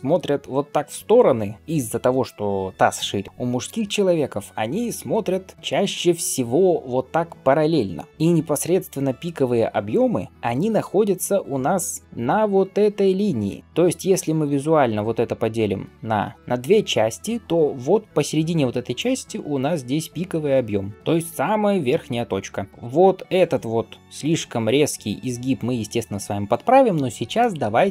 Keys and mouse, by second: 10.4 g, 12.0-16.3 d, 13.6-20.9 drag, 18.2 d, 18.7 d, 18.7 d, 18.8 d, 20.9-27.9 right drag, 20.9 d.